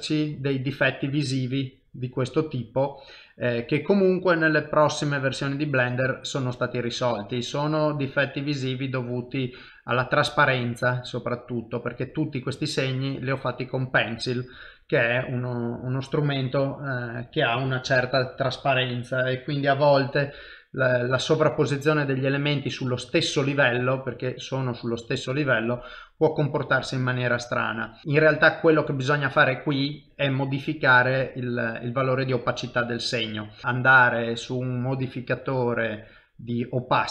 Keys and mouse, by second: 14.9 middle click, 16.6 ctrl+middle click, 17.9 ctrl+alt+KP_0, 20.5 F12, 28.0 click, 28.3 F12, 33.6 click.